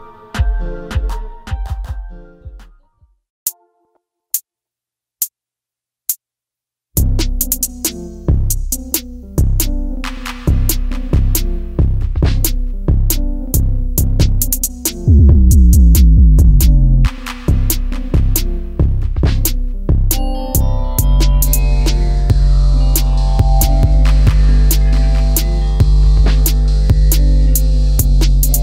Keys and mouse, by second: 0.0 ctrl+z, 0.2 ctrl+z, 0.3 ctrl+z, 0.4 ctrl+z, 0.5 ctrl+z, 1.0 ctrl+z, 1.5 ctrl+z, 1.6 ctrl+z, 2.8 click, 4.7 click, 5.5 g, 6.0 click, 7.0 Tab, 7.2 middle click, 9.6 KP_1, 10.9 click, 12.5 click, 13.4 alt+click, 14.0-15.5 drag, 16.4 click, 17.8 click, 22.7 click, 24.5 click, 25.7 click, 25.9 click, 26.7 click.